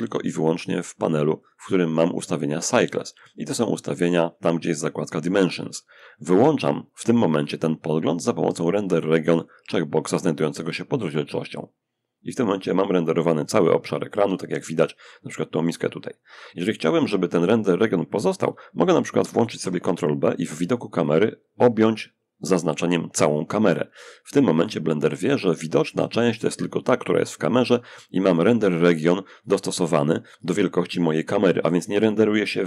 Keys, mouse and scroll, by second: 0.6 click, 8.6 click, 18.7 ctrl+b, 20.3-24.5 drag.